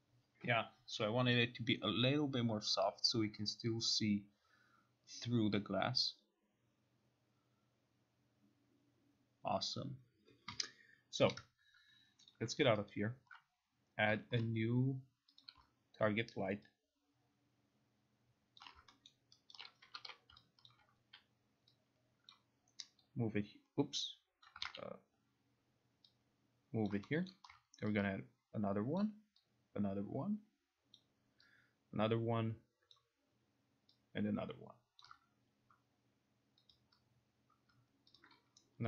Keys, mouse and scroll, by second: 12.4 click, 13.0 alt+right click, 14.2 alt+right click, 15.5 click, 18.7 alt+click, 19.2 alt+middle click, 19.7 alt+right click, 20.1 e, 20.2 e, 20.8 alt+click, 22.4 click, 24.6 click, 24.7 ctrl+z, 27.0 click, 27.4 alt+middle click, 29.1 ctrl+click, 31.1 ctrl+click, 33.1 ctrl+click, 35.1 ctrl+click, 36.9 click, 37.8 click, 38.3 shift+click.